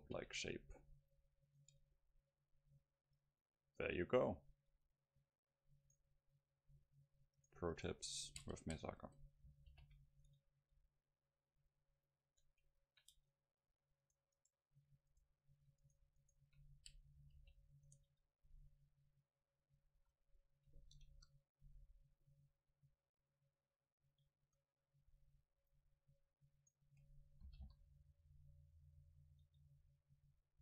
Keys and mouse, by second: 0.1 alt+m, 1.7 Tab, 2.1-3.5 middle drag, 4.8 Tab, 6.1 right click, 6.6 middle click, 6.7 right click, 8.7 right click, 9.8 alt+m, 10.8 Tab, 11.0 middle click, 12.1 middle click, 13.2 Tab, 13.7 click, 14.2-15.7 middle drag, 14.2-16.7 right drag, 17.4 alt+m, 18.2 Tab, 18.8 middle click, 19.0 middle click, 19.8 a, 20.0 a, 21.2 KP_0, 24.5 Tab, 25.8-27.5 drag, 26.6 right click, 27.5 g, 27.7 click, 29.5 Tab, 29.5-30.6 drag, 30.3 a.